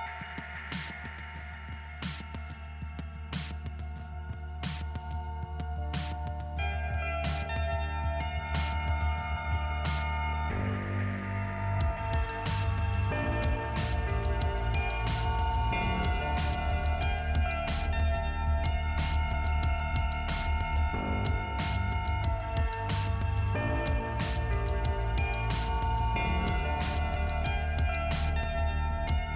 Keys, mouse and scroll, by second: 0.6 k, 1.9 scroll up 2, 3.2 scroll up 1, 3.3 click, 4.4 click, 6.2 click, 7.8 click, 9.2 click, 10.6 click, 12.2 click, 12.8 click, 14.2 click, 17.0 click, 19.2 click, 20.1 scroll down 1, 22.0 click, 24.2 click, 26.4 click.